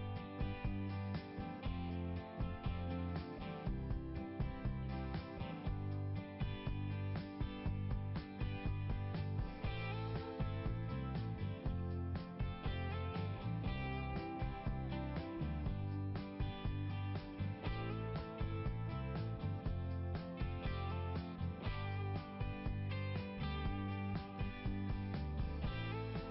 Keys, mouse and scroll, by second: 0.9 scroll up 1, 4.1 right click, 4.2 right click, 5.9 click, 6.0 click, 7.8 click, 10.0 click, 13.7 click, 13.8 click, 15.8 click, 16.7 click, 17.0 click, 23.2 right click, 23.5 right click, 25.0 click, 25.1 click, 25.8 click, 26.0 click.